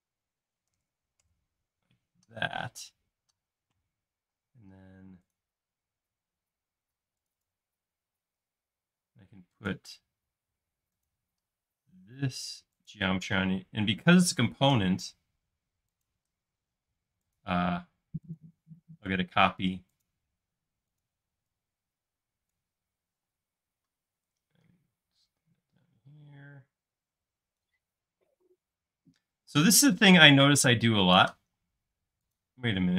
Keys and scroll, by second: 0.8 9, 1.3 Return, 2.6 m, 4.4 space, 7.2 typing, 8.2 l, 11.4 l, 16.8 l, 19.0 c, 21.3 e, 22.9-23.7 typing, 28.3 space, 29.4 p, 31.6 space.